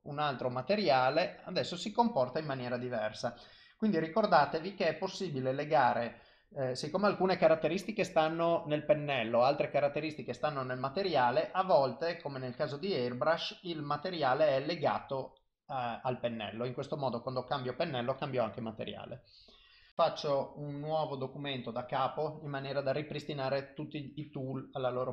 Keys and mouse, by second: 0.4 click, 1.5 click, 3.2 click, 13.2 click, 13.8 click, 15.2 click, 19.9 click.